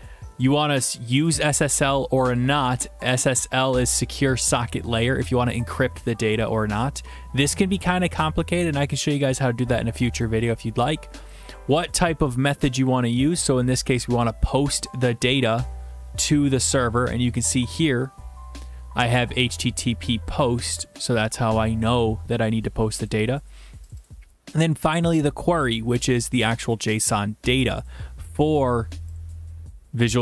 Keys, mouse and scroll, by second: 0.4 click, 1.2 click, 1.3 click, 2.6 click, 3.3 click, 3.4 click, 11.3 click, 13.3 click, 17.5 click, 19.1 click, 19.2 click, 23.1 click, 23.9 click, 24.0 click, 25.6 click, 27.9 click, 29.2 click.